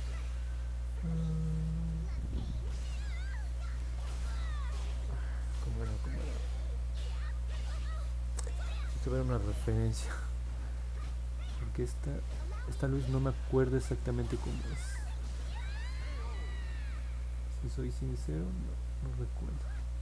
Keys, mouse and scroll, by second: 0.1 click, 0.4 click, 0.7 click, 1.0 click, 1.3 click, 1.6 click, 1.9 click, 2.2 click, 2.5 click, 2.9 click, 3.2 click, 3.5 click, 3.8 click, 4.0 click, 5.2 scroll down 1, 5.9 scroll down 1, 6.3 scroll up 1, 7.6 alt+middle click, 8.6 scroll up 2, 11.5 click, 12.3 click, 13.1 click, 13.4 click, 13.7 click, 14.0 click, 14.3 click, 14.6 click, 14.9 click, 15.2 click, 15.7 click, 16.1 click, 16.6 click, 17.3 click, 17.6 click, 17.9 click, 18.2 click, 18.6 click, 18.8 click, 19.1 click, 19.4 click, 19.8 click.